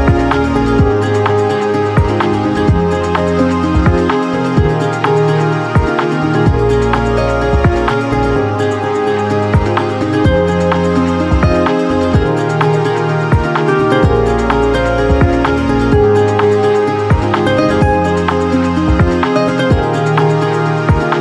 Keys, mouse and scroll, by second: 21.0 click.